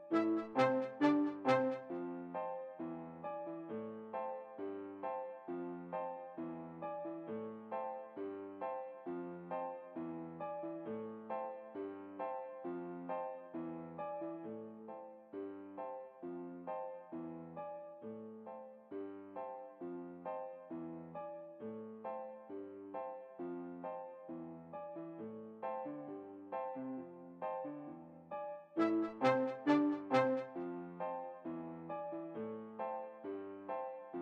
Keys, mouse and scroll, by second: 1.6-3.0 right drag, 3.1 s, 7.6-9.0 right drag, 7.7 s, 13.2-14.8 right drag, 13.6 s, 15.4-17.0 right drag, 15.8 s, 20.9-22.5 right drag, 21.2 s, 22.6-24.1 right drag, 22.9 s, 26.6-28.0 right drag, 26.9 s, 27.7 s, 31.3-32.7 right drag, 32.4 s.